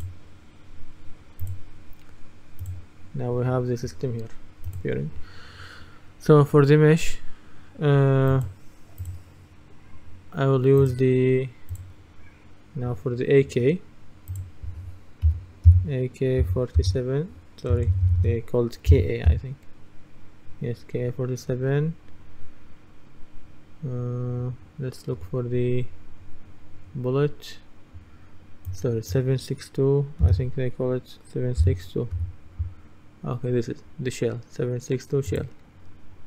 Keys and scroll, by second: 15.3-17.8 typing, 19.0-19.3 typing, 30.3 typing, 31.7-32.2 typing.